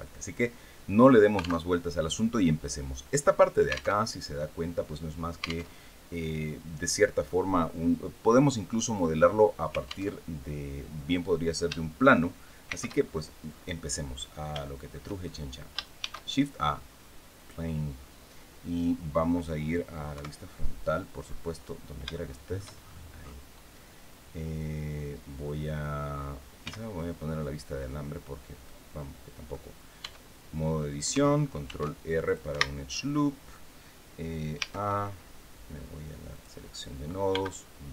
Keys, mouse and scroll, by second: 1.3 alt+Tab, 3.7 alt+Tab, 5.4 alt+Tab, 9.8 alt+Tab, 10.4-10.8 scroll down 2, 12.4 shift+c, 13.1-13.5 scroll up 2, 13.8 scroll up 2, 14.3 shift+middle click, 14.9 shift+scroll up 2, 15.7 shift+a, 17.1 click, 19.8 KP_1, 20.9-21.6 scroll down 4, 21.8 shift+middle click, 22.5-23.2 shift+scroll up 4, 26.3 z, 28.3-29.3 middle drag, 29.7 Tab, 30.4 scroll up 2, 31.3 ctrl+r, 31.9 ctrl+click, 32.2 Escape, 34.2 a, 36.0 click, 37.0 b, 37.7-37.9 drag.